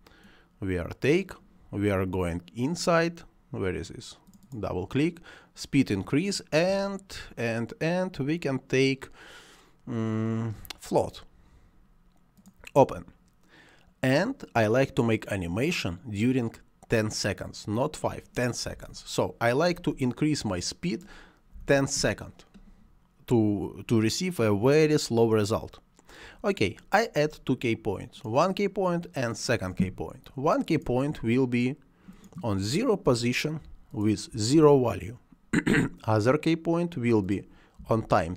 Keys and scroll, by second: 18.5 1, 21.4 1, 21.8 Return, 32.9 0, 34.2 0, 34.5 Return, 37.7 1.